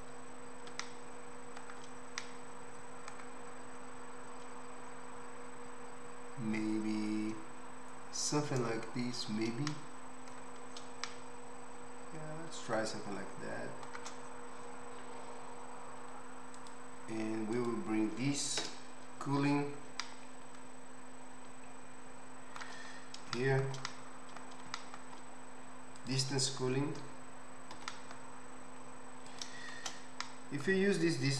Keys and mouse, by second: 16.0 z, 18.6 KP_0, 26.0 click, 26.1-31.3 middle drag, 27.7 g, 29.8 shift+Tab.